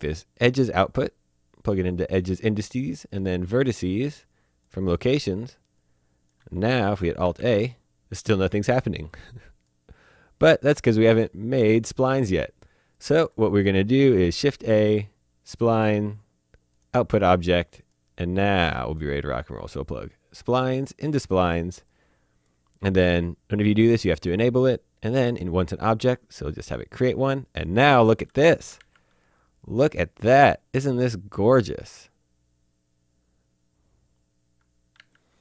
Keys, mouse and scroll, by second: 6.0 click, 6.8 alt+a, 7.4 alt+a, 9.1-10.8 drag, 11.6 click, 13.9 a, 15.1 click, 16.7 click, 18.4 middle click, 20.3 click, 24.2 click, 26.6 click, 28.7 alt+Num_Lock, 28.7 alt+a, 34.9 alt+Num_Lock, 35.0 a.